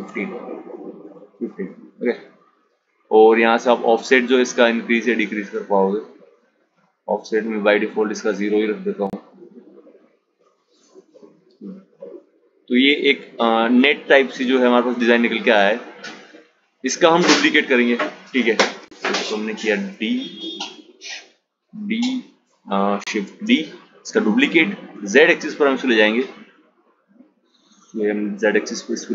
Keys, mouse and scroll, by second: 2.5-5.6 drag, 7.2-10.3 drag, 10.9 click, 14.9 click, 16.7 click, 19.9 ctrl+d, 22.3 shift+d, 26.9 click.